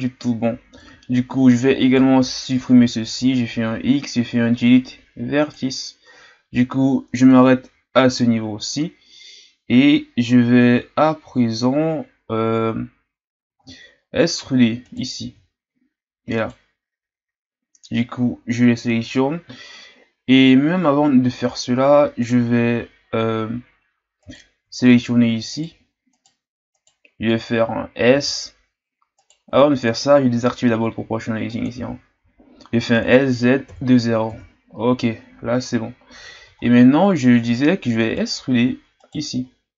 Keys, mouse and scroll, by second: 0.0-1.8 scroll up 1, 1.8-3.1 alt+right drag, 3.1 x, 13.7-14.0 shift+scroll down 1, 14.0-14.8 scroll up 2, 14.8-19.3 right drag, 24.2-28.0 right drag, 28.0 s, 31.5 click, 32.9 s, 36.6-37.1 shift+scroll down 2, 37.1-38.1 scroll up 2, 38.1-39.5 right drag, 39.5-39.7 scroll down 2.